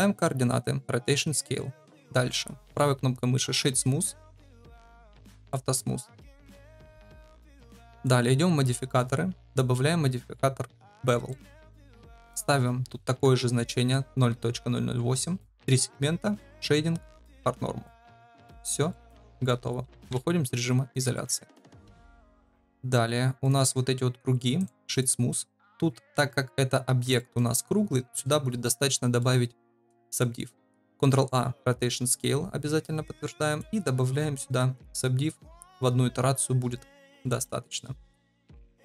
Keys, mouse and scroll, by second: 2.5 click, 5.4 click, 7.9 click, 8.9 click, 11.2 shift+drag, 12.8 ctrl+v, 13.6 shift+drag, 15.6 middle click, 16.4 click, 17.2 click, 18.1-18.4 middle drag, 18.8-19.1 shift+middle drag, 21.1-21.6 middle drag, 21.8 shift+middle drag, 22.4 middle click, 24.5-25.0 right drag, 27.1 shift+middle drag, 28.8-29.2 middle drag, 30.8 ctrl+a, 36.7-37.1 middle drag, 37.4 shift+middle drag, 38.3 click, 38.7 shift+middle drag.